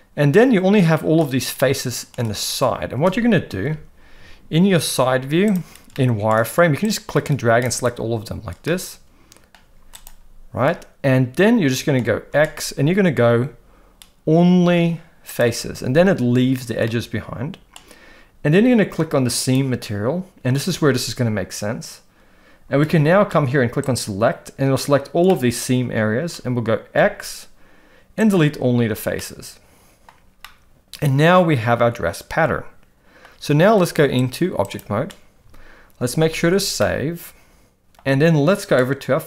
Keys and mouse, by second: 1.6 middle click, 3.6 KP_3, 4.1 z, 5.9 shift+middle click, 6.9 click, 8.6 middle click, 9.6 z, 10.6-12.0 middle drag, 12.3 x, 16.9 middle click, 19.4 click, 23.9 click, 25.3-26.3 middle drag, 26.9 x, 29.2 middle click, 30.4-33.2 middle drag, 34.3 click, 36.0 ctrl+s, 36.3 ctrl+s, 36.8-37.9 middle drag.